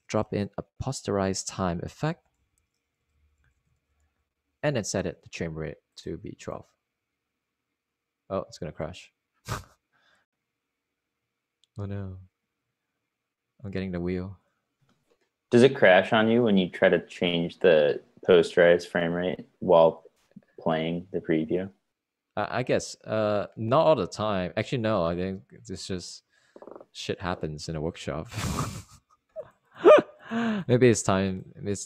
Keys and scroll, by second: 2.0 Tab, 2.9-6.1 typing, 7.4-8.3 typing.